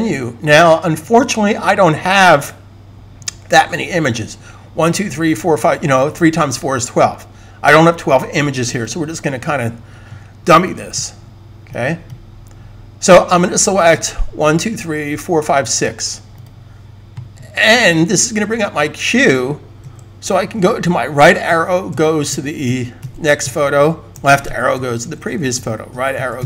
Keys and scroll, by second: 19.7 Right, 20.3 Right, 21.0 Right, 21.4 Right, 21.8 Right, 22.2 Right, 22.4 Right, 22.9 Right, 23.3 Right, 24.9 Left, 25.1 Left, 25.3 Left, 25.6 Right, 26.2 Right.